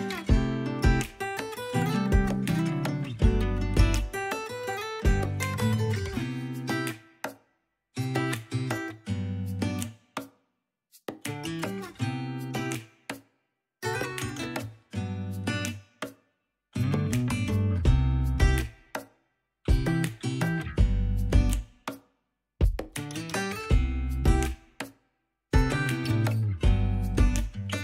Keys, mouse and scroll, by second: 1.1 middle click, 1.3 scroll down 2, 1.5 scroll up 3, 1.6 click, 2.6 middle click, 2.7 KP_Decimal, 2.9 scroll down 3, 2.9 middle click, 3.2 scroll up 2, 3.5 middle click, 3.6 shift+click, 3.9 middle click, 3.9 click, 4.4 scroll down 2, 4.5 middle click, 5.3 ctrl+KP_1, 5.4-7.4 drag, 7.4 middle click, 7.7 click, 8.0 middle click, 8.3 KP_1, 8.4 alt+z, 8.6 f, 8.7 click, 9.5 alt+z, 9.7 click, 9.9 alt+z, 10.1 alt+z, 10.2 ctrl+Tab, 10.3 ctrl+Tab, 10.4 click, 11.0 alt+z, 11.1 alt+z, 11.2 ctrl+Tab, 11.2 scroll down 5, 11.3 ctrl+s, 11.5 middle click, 11.8 scroll up 5, 11.9 middle click, 12.4-15.5 typing, 12.9 scroll down 9, 13.1 click, 13.4 scroll up 1, 15.2 ctrl+Tab, 15.4-15.8 scroll down 4, 15.9 ctrl+Tab, 16.1 click, 16.6 r, 16.8 g, 17.1 ctrl+Tab, 17.2 click, 17.6 scroll up 2, 17.7-18.7 drag, 18.7 scroll up 4, 18.9 click, 19.2 scroll down 2, 19.4-20.5 drag, 20.5 alt+z, 20.6 scroll down 3, 20.7 middle click, 21.0 alt+z, 21.2 alt+z, 21.3 click, 21.8-22.2 scroll up 4, 21.9 click, 22.0 middle click, 22.2 f, 22.3 click, 22.4 middle click, 22.5 click, 22.8 middle click, 23.2 scroll up 2, 23.3 click, 23.4 middle click, 23.5 click, 23.8 middle click, 24.0 scroll down 7, 24.1 middle click, 24.4 KP_3, 24.6 KP_1, 24.7 scroll up 5, 24.9-26.7 drag, 25.9 alt+z, 26.3 alt+z, 26.7 alt+z, 26.7 middle click, 26.8 scroll up 3, 26.9 middle click, 27.0 click, 27.2 middle click, 27.3 shift+click, 27.4 scroll down 4, 27.4 middle click, 27.6 shift+click, 27.7 middle click.